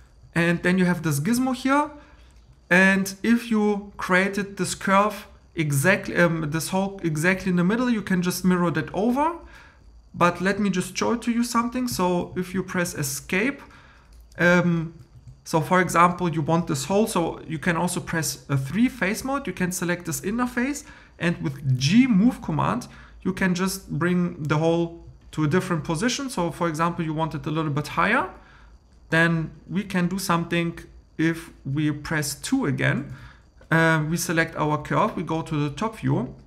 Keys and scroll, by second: 11.9 Escape, 15.1 3, 21.8 g, 33.1 2.